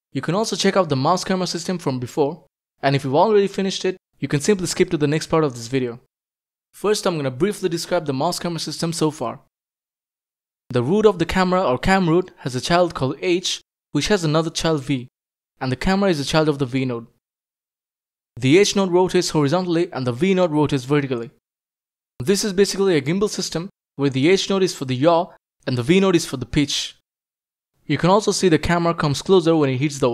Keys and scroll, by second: 0.1 a, 0.7 d, 1.3 s, 2.7-6.3 typing.